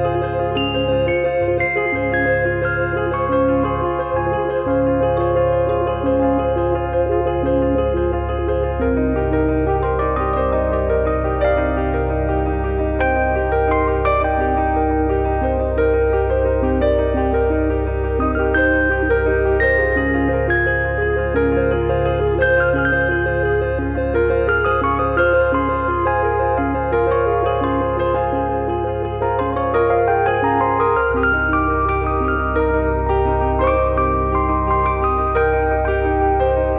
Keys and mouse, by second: 0.1 click, 1.7 click, 3.8 click, 5.6 click, 6.9 click, 8.8 click, 13.4 click, 13.6 click, 14.5 click, 15.1 click, 18.7 click, 20.7 alt+z, 22.8 click, 24.4 click, 27.9 click, 29.1 click.